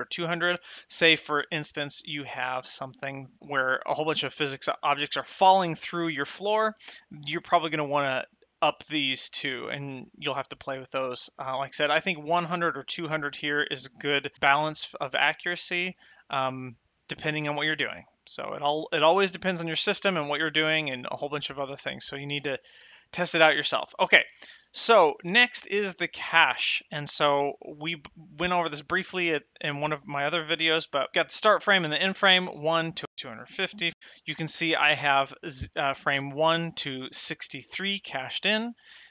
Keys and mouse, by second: 0.4 middle click, 1.9 shift+middle click, 2.6 middle click, 10.2 middle click, 10.9 shift+middle click, 21.1 middle click.